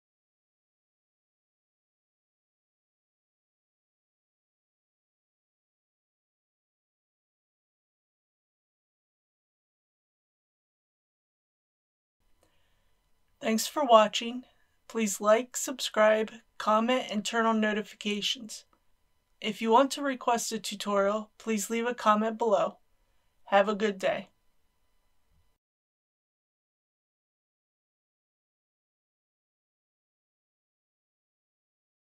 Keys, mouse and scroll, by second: 3.6 middle click, 5.0-5.5 scroll up 1, 5.5 click.